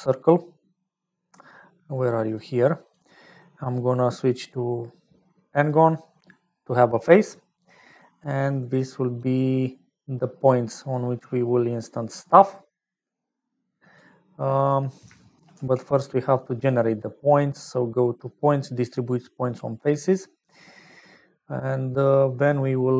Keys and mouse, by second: 4.0-5.6 middle drag, 7.2 click, 9.1-10.4 middle drag, 10.9-13.9 middle drag, 14.4 middle click, 14.9 middle click, 15.5 shift+a, 22.2 middle click.